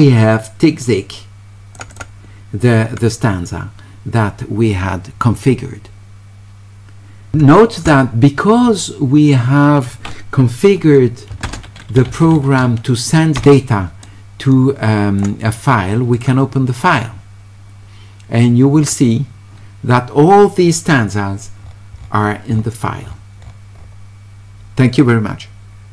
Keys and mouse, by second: 0.8 click, 1.9 click, 11.4 space, 12.1 q, 12.3 e, 14.0-15.2 drag, 16.2 click, 18.9 click, 22.0 middle click, 22.5 middle click, 23.7-25.9 middle drag.